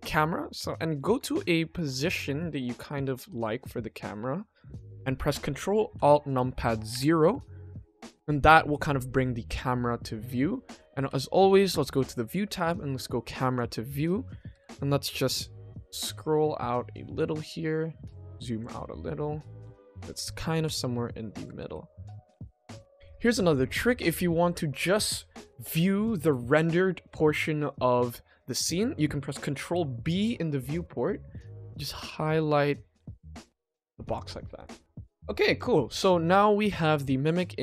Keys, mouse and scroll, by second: 0.6-0.9 middle drag, 0.9 middle click, 1.2-1.8 ctrl+middle drag, 2.1-3.1 shift+middle drag, 3.1-5.0 middle drag, 6.9 ctrl+alt+KP_0, 12.0 click, 13.4 click, 15.2 middle click, 15.2 n, 15.9-17.0 ctrl+middle drag, 17.3 middle click, 18.2 ctrl+middle click, 18.8-20.4 shift+middle drag, 20.7 ctrl+middle click, 21.5 n, 22.3 click, 22.6 click, 22.9 n, 23.7 ctrl+s, 34.1 click, 34.5 click, 35.5 click, 37.0 ctrl+s.